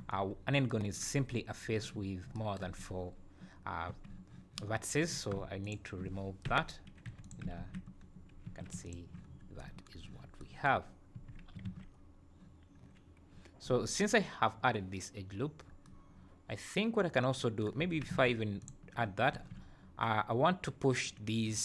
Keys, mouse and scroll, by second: 0.1-0.5 scroll up 2, 1.3 scroll up 2, 3.9 1, 5.0 click, 5.6 shift+click, 6.4 j, 7.0 2, 7.2 click, 7.5 ctrl+x, 8.0-8.4 scroll down 3, 8.4 3, 8.8 alt+click, 9.2 scroll down 2, 11.1 1, 11.6 alt+a, 13.0 scroll down 1, 17.9 2, 18.6 alt+click, 19.4 3, 21.5 click.